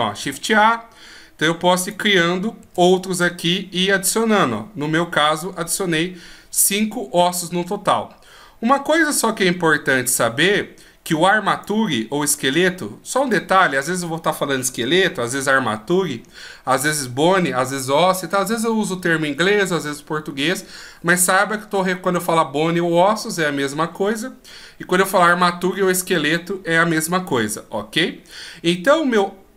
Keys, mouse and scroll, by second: 0.1 shift+a, 1.7 click, 2.5 shift+a, 4.0-4.8 scroll down 1, 7.4-10.6 scroll down 1, 11.4 click, 12.2 click.